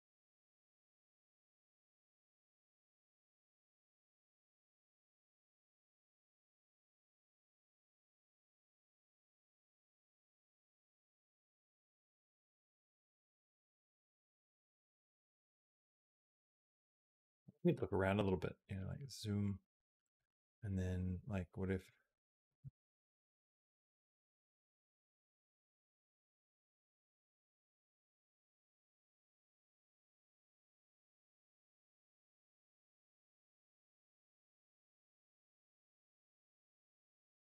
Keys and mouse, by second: 0.1 click, 0.2 space, 8.8 space, 9.7 click, 9.9 space, 16.1 space, 17.0 middle click, 17.6-20.0 drag, 21.6 click, 22.4 g, 24.5 g, 25.9-27.1 drag, 27.6 g, 31.3-34.6 drag, 34.6 space, 37.3 space.